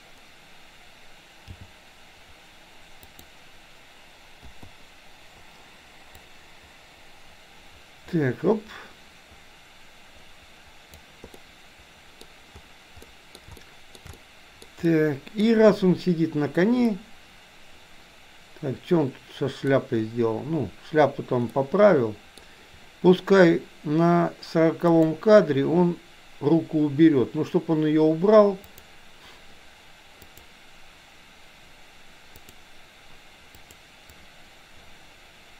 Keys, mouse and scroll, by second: 1.6 g, 4.4 i, 6.2-11.1 drag, 11.4-12.2 middle drag, 13.1-13.4 middle drag, 13.6-13.9 shift+middle drag, 14.1-14.6 middle drag, 14.8-15.4 middle drag, 16.9-19.8 middle drag, 21.6-22.4 middle drag, 24.9 click, 30.3 click, 33.7 click, 34.2-35.5 drag.